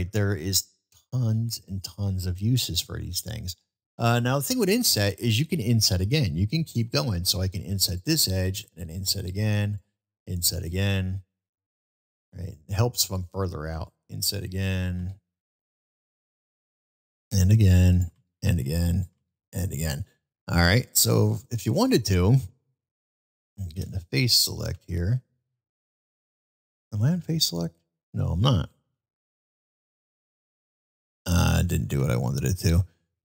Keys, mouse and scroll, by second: 0.3-1.7 middle drag, 2.6 middle click, 20.3-21.4 middle drag, 24.7 alt+2, 32.1 alt+click.